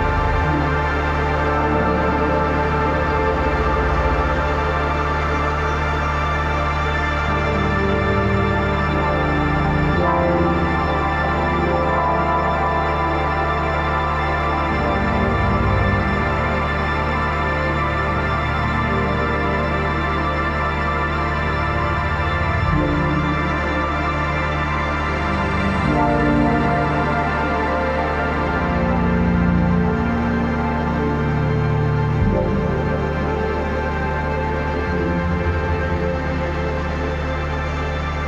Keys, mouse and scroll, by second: 0.4 ctrl+shift+], 4.2-8.8 alt+shift+drag, 10.9 ctrl+a, 11.4-24.4 typing, 25.1 click, 29.5-31.0 alt+shift+drag, 31.6 ctrl+-, 32.5 space, 32.6 click, 33.3 click, 33.7 shift+click, 35.8 space, 36.0 click, 36.1 space, 36.4 click, 37.4 space.